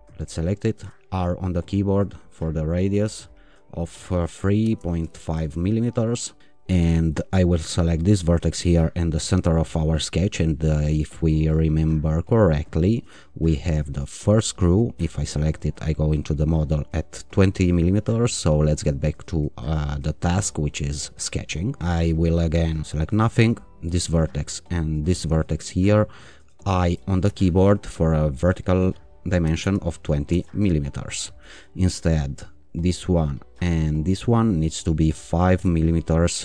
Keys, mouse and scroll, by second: 0.0 click, 0.7 r, 2.5 click, 4.1 3, 4.6 ,, 5.1 5, 5.3 Return, 6.4 right click, 7.5 click, 9.3 click, 14.0 click, 15.6 click, 19.0 click, 22.8 click, 23.8 click, 25.4 click, 27.2 i, 29.2-30.1 typing, 30.3 Return, 32.7 click, 34.3 click, 35.5 i.